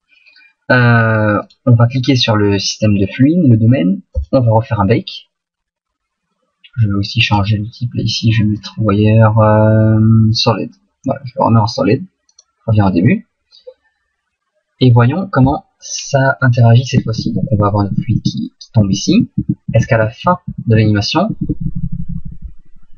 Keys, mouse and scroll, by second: 4.1 right click, 4.3 click, 10.9 click, 12.3 click, 17.0 Right, 17.2 Right, 17.4 Right, 17.6 Right, 18.0 Right, 18.2 Right, 18.9 Right, 19.1 Right, 19.4 Right, 19.7 Right, 20.0 Right, 20.3 Right, 20.5 Right, 20.7 Right, 21.3 Left, 21.5 Left, 21.7 Left, 21.9 Left, 22.1 Left, 22.3 Left, 22.5 Left, 22.7 Left, 22.9 Left.